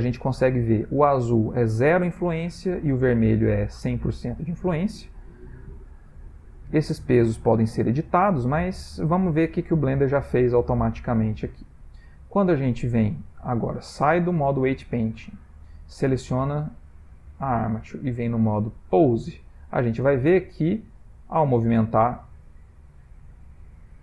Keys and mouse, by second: 5.8 click, 7.1 click, 9.3 click, 10.6 click, 11.0 click, 11.4 click, 15.3 click, 16.1 click, 18.1 click, 20.1 click, 20.6 r, 23.0 click, 23.4 middle click, 23.9 r.